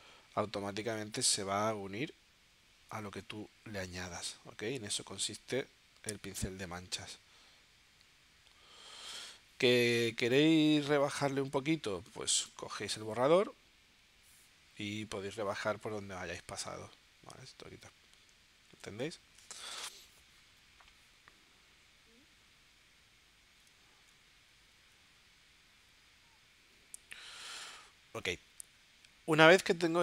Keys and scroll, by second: 18.7 super+z.